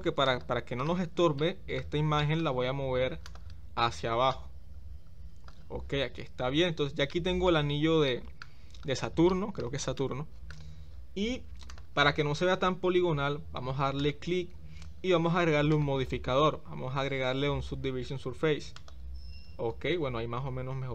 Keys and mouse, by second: 1.4 middle click, 2.2 shift+middle click, 4.4-5.5 drag, 7.1-7.4 middle drag, 8.1-8.4 shift+middle drag, 9.3 middle click, 10.0-10.5 shift+middle drag, 15.7-18.9 drag.